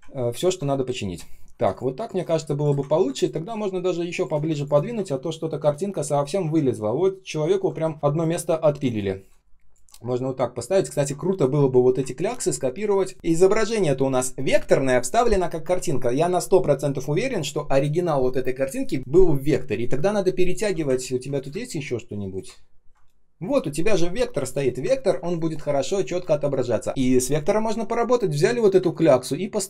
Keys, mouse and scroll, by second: 0.0 ctrl+scroll up 1, 1.6 shift+click, 1.9 shift+click, 2.8 ctrl+scroll down 1, 4.4 space, 4.8 ctrl+shift+3, 5.0 ctrl+z, 5.6 ctrl+shift+3, 7.8 ctrl+scroll up 1, 8.4 ctrl+shift+3, 10.8 ctrl+scroll up 1, 12.1 ctrl+click, 12.9 ctrl+shift+3, 13.1-13.8 ctrl+scroll up 1, 20.8-21.3 ctrl+scroll down 1, 21.4 space, 21.9 space, 21.9 space, 22.5 ctrl+scroll up 1, 22.9 ctrl+shift+3, 24.3 ctrl+shift+3, 24.9 ctrl+scroll down 1, 25.1 space, 25.6 space, 25.6 space, 26.2 ctrl+scroll up 1, 28.8 ctrl+click.